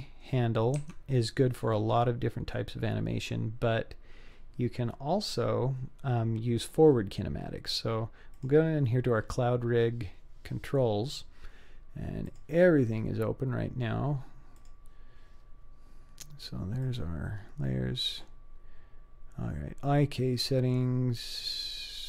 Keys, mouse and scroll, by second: 1.6 scroll down 2, 2.3-2.6 scroll up 1, 8.4 click, 12.3 drag, 14.6 click, 16.9 click, 18.9-19.9 scroll down 2, 19.9-20.8 scroll down 2, 20.8-22.0 scroll down 3.